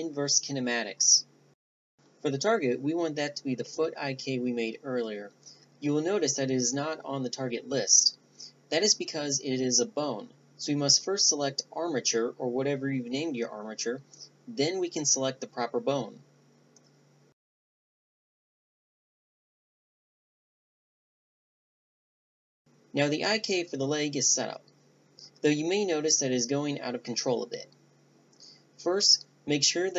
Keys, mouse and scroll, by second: 0.2-1.5 drag, 2.2 click, 8.6 BackSpace, 8.8 BackSpace, 19.5-20.5 drag, 22.7-23.7 right drag, 24.4-26.6 middle drag, 26.6-28.7 drag, 28.7-29.9 middle drag.